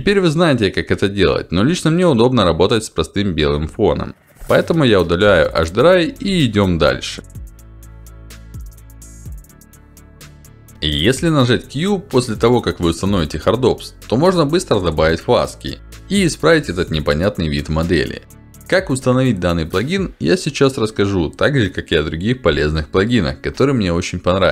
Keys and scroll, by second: 5.0 Delete, 10.7 q, 19.3 alt+w, 22.4 alt+w.